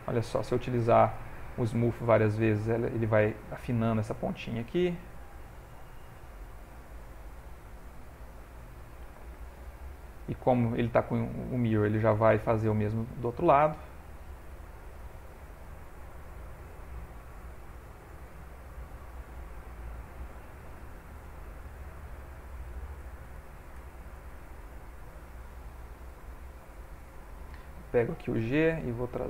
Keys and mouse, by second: 0.0 shift+click, 0.4 shift+click, 0.8 shift+click, 1.3 shift+click, 2.1 click, 3.9 click, 4.2 click, 5.1 click, 5.8 click, 5.9 f, 6.9 click, 7.6 click, 8.2 middle click, 8.9 ctrl+middle click, 9.3 shift+middle click, 9.8 ctrl+middle click, 10.2 middle click, 11.3 shift+middle click, 11.8 middle click, 13.2 middle click, 13.7 shift+middle click, 14.1 shift+click, 14.9 shift+click, 15.2 middle click, 16.1 click, 17.1 middle click, 18.0 f, 18.6 g, 18.9 click, 20.8 click, 20.8-21.6 shift+click, 21.4 shift+click, 21.6 middle click, 22.6 shift+click, 23.1 shift+click, 23.4 shift+click, 23.8 shift+click, 24.2 shift+click, 24.6 ctrl+middle click, 25.1 middle click, 26.4 shift+middle click, 26.9 middle click, 28.5 g, 28.8 click.